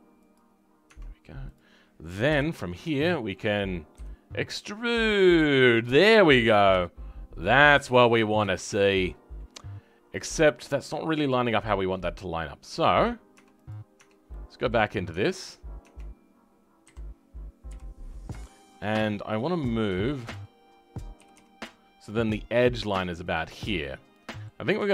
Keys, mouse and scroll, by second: 0.3 click, 0.8 Tab, 2.2 KP_7, 3.0 shift+middle click, 3.8 e, 8.0-8.4 scroll down 3, 8.4-10.3 shift+middle drag, 10.3-10.7 scroll up 4, 10.7 middle click, 11.4-13.2 scroll down 9, 13.2 Tab, 14.2 middle click, 15.0 Tab, 15.7 Tab, 17.6 KP_3, 17.9-18.3 scroll up 6, 18.3 shift+middle click, 18.8 scroll up 3, 19.6 scroll up 7, 19.9-21.1 shift+middle drag, 21.1 g, 23.7 middle click, 24.5 scroll down 2, 24.8 shift+middle click.